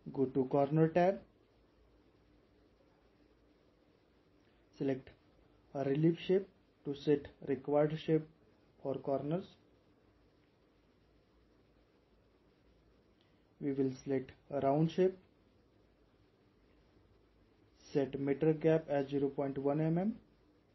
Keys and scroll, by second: 20.0-20.7 typing.